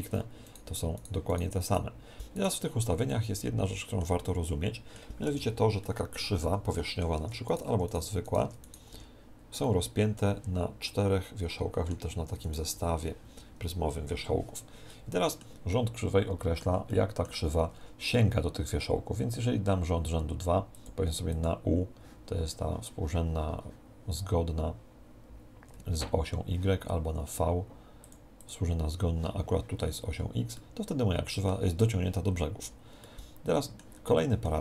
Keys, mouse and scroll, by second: 3.0-7.4 middle drag, 5.2 Tab, 7.1 Tab, 7.4-10.3 right drag, 7.8 Tab, 8.4 Tab, 8.9 Tab, 9.6-11.5 middle drag, 12.2 Tab, 12.4-14.3 right drag, 12.6 Tab, 14.8-20.7 middle drag, 20.7-23.2 drag, 28.0-30.3 drag, 30.5-32.3 middle drag, 33.0-34.6 middle drag.